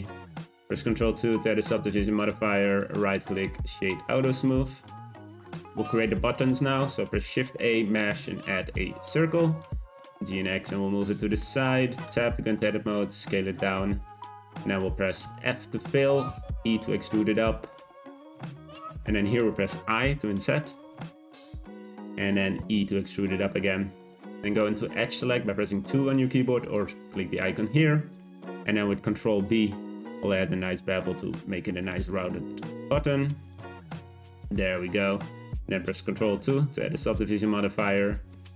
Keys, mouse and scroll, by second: 0.7 ctrl+2, 1.2-2.1 scroll up 1, 2.1-3.1 right drag, 3.1 click, 3.5 middle click, 4.5-4.9 scroll down 3, 4.9-6.7 middle drag, 6.7 shift+a, 9.8 z, 10.0 g, 11.4 shift+middle click, 12.0 Tab, 12.3 s, 14.2 shift+middle click, 14.6-15.2 scroll up 4, 15.2 f, 16.2 e, 19.8 i, 22.5 e, 26.6-28.1 drag, 28.1-28.6 scroll up 1, 28.8 b, 33.7 Tab, 34.1-36.4 scroll down 1, 36.4 ctrl+2, 36.9-37.7 middle drag, 37.7 scroll up 2, 38.3 Tab.